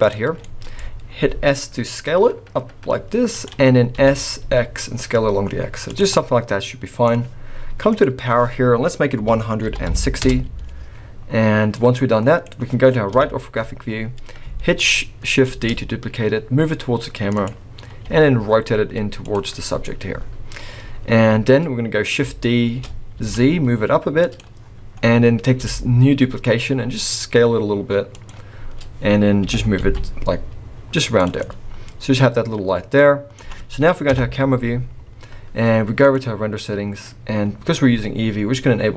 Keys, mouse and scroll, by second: 0.3-1.0 scroll down 5, 0.4 middle click, 1.1 s, 3.9 s, 6.1 middle click, 7.9 click, 11.3-11.7 scroll up 1, 11.7 middle click, 13.1 KP_3, 13.8-14.2 scroll up 2, 15.5 shift+d, 18.0 r, 19.8 middle click, 22.6 shift+d, 24.3 click, 25.6 s, 29.4 g, 31.3 scroll up 1, 31.4 middle click, 34.1 KP_0, 36.0 click.